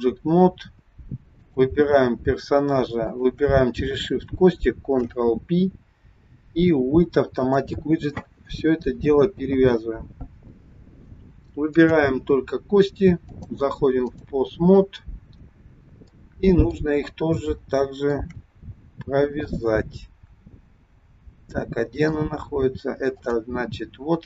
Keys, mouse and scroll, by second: 0.6 scroll down 2, 1.3 click, 3.0 shift+click, 4.8 ctrl+p, 11.7 click, 13.2 click, 15.1-15.8 scroll up 4, 16.1 middle click, 17.5 shift+middle click, 18.8 scroll down 1, 19.5 middle click, 23.1 click.